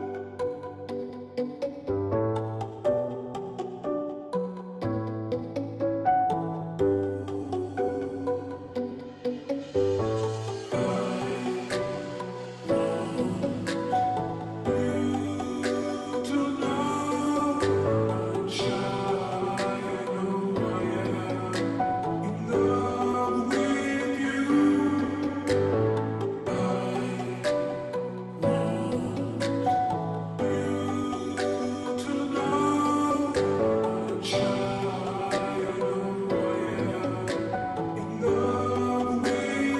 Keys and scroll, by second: 0.6 ], 0.8 ], 2.0 ], 2.2 ], 4.3 space, 4.8 space, 12.1 ], 20.8-21.6 ], 21.7 ], 21.7 ], 35.6-36.7 space.